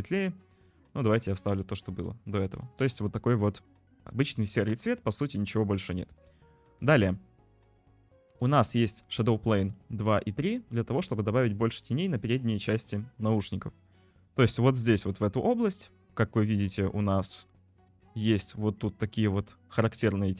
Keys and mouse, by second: 7.7 click, 9.0 click, 9.9 click, 10.2-13.0 drag, 13.7 shift+click, 17.9 shift+middle click.